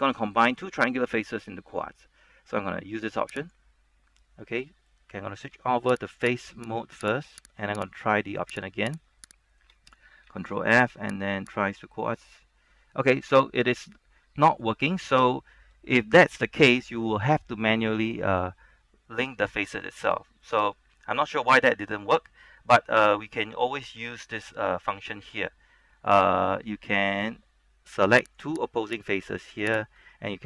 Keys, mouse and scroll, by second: 3.5 click, 4.6 middle click, 6.2 ctrl+Tab, 6.2 click, 6.7 right click, 8.2 shift+right click, 9.3 shift+right click, 9.7 shift+right click, 10.4 ctrl+f, 11.7 click, 13.1 middle click, 13.5 scroll up 1, 13.7-20.2 middle drag, 20.4-23.6 shift+middle drag, 24.2 ctrl+Tab, 28.4 ctrl+Tab, 28.4 click, 29.0 right click.